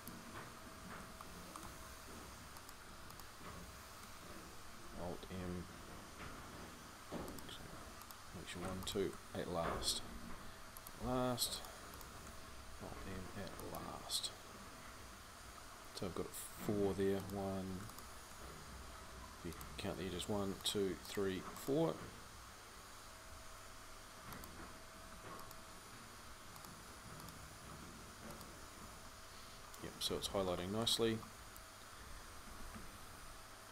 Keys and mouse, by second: 5.0 alt+m, 9.9 alt+m, 12.8 alt+m, 29.8-33.7 middle drag.